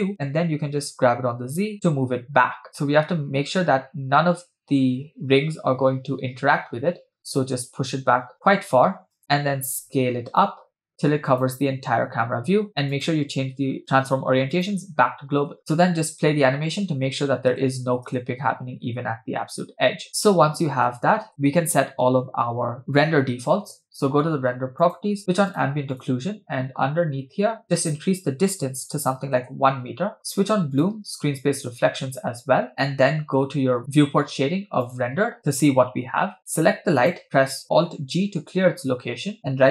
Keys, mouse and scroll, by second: 1.0 g, 9.5 s, 12.9-15.1 drag, 15.6 space, 17.0 space, 17.5 space, 17.7 space, 18.1 space, 20.4 space, 20.9 space, 21.2 space, 24.8-25.3 drag, 25.5 click, 27.8-29.5 drag, 30.8-32.4 drag, 35.1 click, 37.0 click, 38.1 alt+g.